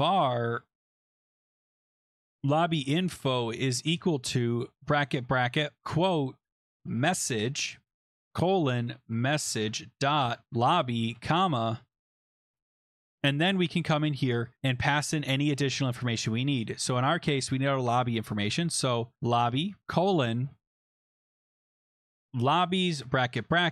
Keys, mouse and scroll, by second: 0.0-4.2 typing, 5.5-12.7 typing, 7.8 Escape, 7.9 Right, 16.1 typing, 18.3-23.0 typing.